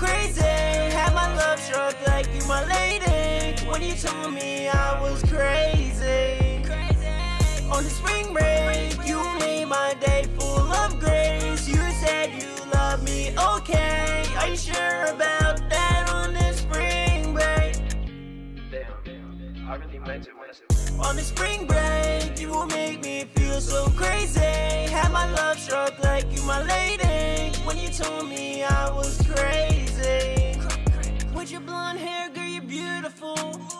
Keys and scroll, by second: 0.0-0.1 typing, 13.1-14.3 typing, 15.9-17.1 typing, 18.2-19.8 typing, 21.0 super+s, 25.3-26.5 typing, 30.8-32.1 typing, 32.3 ctrl+super+w, 32.5 super+s.